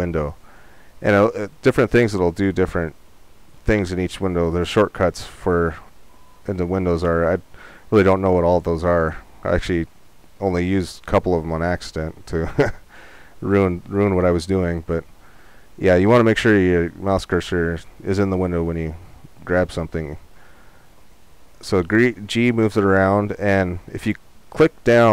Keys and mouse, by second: 17.4-25.0 middle drag, 21.8 g.